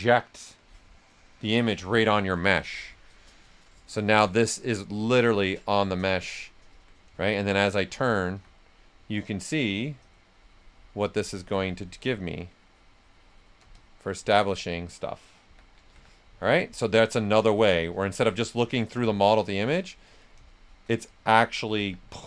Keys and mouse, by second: 2.5 right click, 3.6 right click, 4.1 s, 4.2 click, 4.9 alt+click, 6.3 alt+right click, 7.0 right click, 8.2 s, 8.3 click, 10.1-13.7 alt+drag, 15.2-16.4 typing, 16.4 click, 19.2 shift+click, 19.9 right click, 21.7 s, 21.8-22.2 drag.